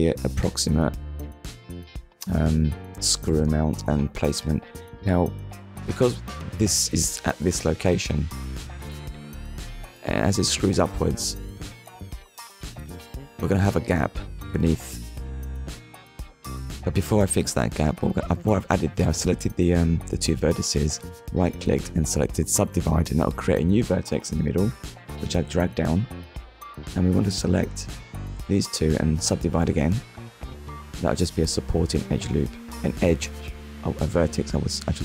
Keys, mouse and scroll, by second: 0.4 click, 1.7 click, 3.0-3.4 scroll up 1, 4.1-4.5 scroll up 2, 4.5 shift+middle click, 6.4 click, 8.1 click, 8.7 shift+click, 10.0 right click, 11.6 click, 12.9 click, 13.7 click, 14.8 click, 21.1 scroll up 1, 22.2 click, 22.9 click, 27.2 click, 28.0 shift+click, 28.7 right click, 29.5 click, 30.1 click, 30.7 click, 31.5 click.